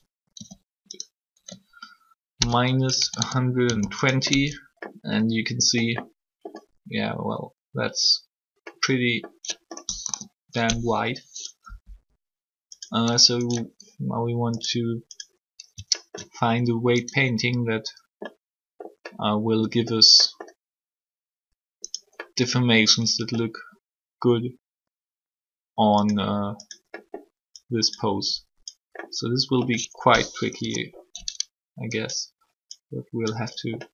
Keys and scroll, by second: 0.0-0.3 typing, 1.3 r, 2.9-4.1 typing, 10.0 3, 30.4 3.